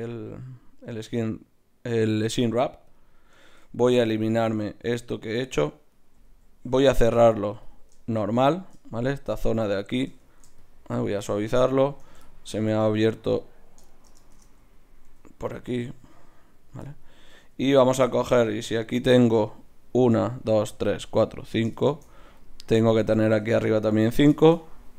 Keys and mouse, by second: 3.5 ctrl+Tab, 4.4 right click, 4.7-6.4 drag, 6.4-8.0 right drag, 6.4 x, 8.0-9.5 middle drag, 10.1 Tab, 10.6-12.9 drag, 11.8 Tab, 12.7 ctrl+Tab, 13.3-15.0 right drag, 14.3 shift+Tab, 15.1 g, 15.8-19.2 drag, 16.0 g, 17.4 g, 24.0 right click.